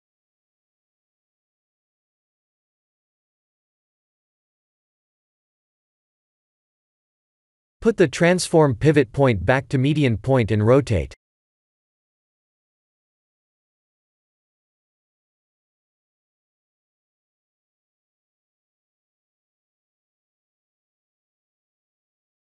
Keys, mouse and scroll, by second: 0.1 middle click, 1.5 click, 1.9 scroll down 2, 2.8 shift+click, 2.8 scroll down 1, 5.0 click, 5.7 KP_3, 8.8 click, 9.9 r, 20.4 click, 22.2 r.